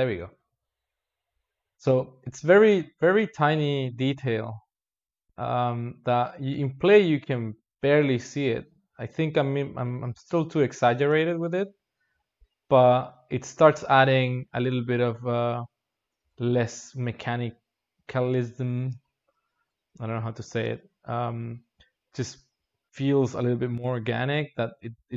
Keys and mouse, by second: 3.0 space, 3.8-6.2 drag, 6.2 space, 10.2 space, 10.9 space, 14.0 space, 14.7-16.1 drag, 16.1 alt+shift+z, 17.3-17.8 drag, 17.8 g, 19.8 g, 21.5 click.